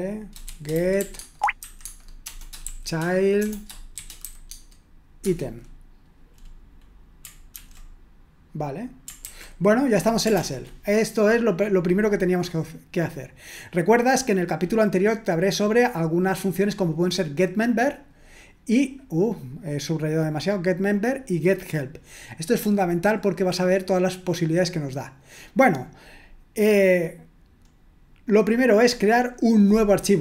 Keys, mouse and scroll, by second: 0.7-5.3 typing, 7.6 ctrl+p, 9.3 ctrl+c, 10.4 ctrl+l, 13.1-14.2 scroll down 1, 17.6-22.8 drag, 25.7 click, 26.7-27.7 scroll down 2, 27.7-28.5 scroll up 2, 28.9 click.